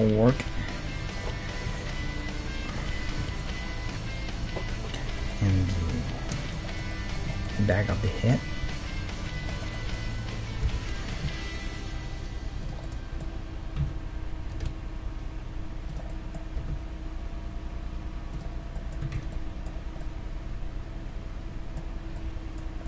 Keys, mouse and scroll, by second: 4.7 Tab, 6.8-8.0 middle drag, 8.6 e, 9.3 click, 11.2 o, 11.2 s, 12.9-14.8 middle drag, 13.8 e, 16.1 middle click, 16.7 s, 18.5 scroll up 1, 18.7 middle click, 19.1 a, 19.2 Tab, 19.4-21.7 middle drag, 22.0 scroll up 1, 22.1-22.8 middle drag.